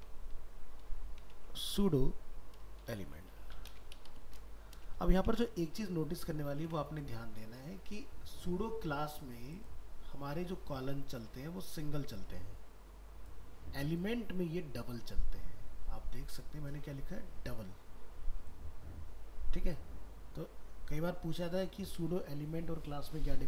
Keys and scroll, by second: 5.3 ctrl+s.